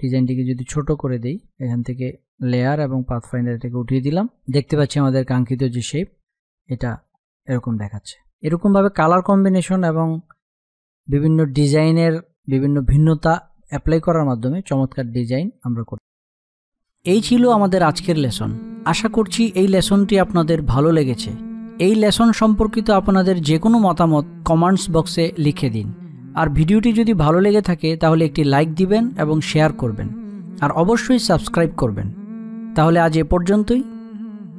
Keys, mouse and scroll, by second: 0.6 space, 0.7 click, 1.5 space, 1.6 click, 3.2 space, 3.4 click, 3.8 space, 5.6 alt+scroll up 1, 6.2 space, 6.3 click, 6.7 space, 7.9 click, 8.0 space, 9.2 click, 9.4 space.